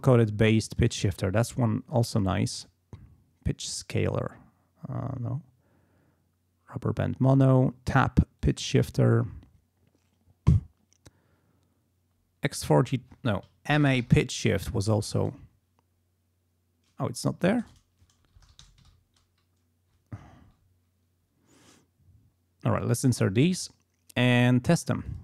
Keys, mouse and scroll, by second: 0.7 click, 3.9 click, 4.3 scroll down 2, 6.6 scroll down 2, 8.4 click, 9.3 scroll down 2, 10.4 scroll down 2, 12.6 click, 13.5-15.1 typing, 17.5 ctrl+a, 17.6 ctrl+BackSpace, 18.1-19.5 typing, 22.9 click, 25.1 click.